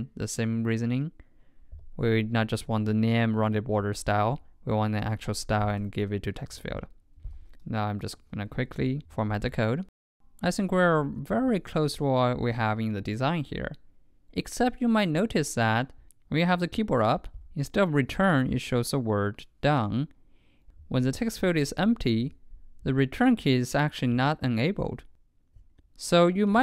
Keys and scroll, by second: 7.3 super+a, 8.2 ctrl+i, 11.2 super+Tab.